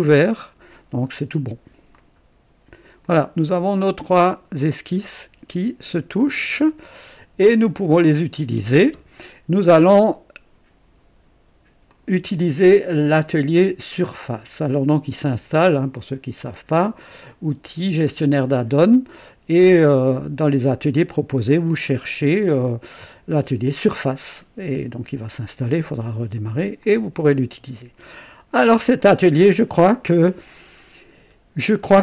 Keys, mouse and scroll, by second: 1.9 click, 3.0 click, 4.1-5.8 drag, 6.9 click, 7.8 right click, 11.8 click, 14.4 click, 17.2 click, 20.8 right click, 26.8-28.9 drag, 31.8-32.0 drag.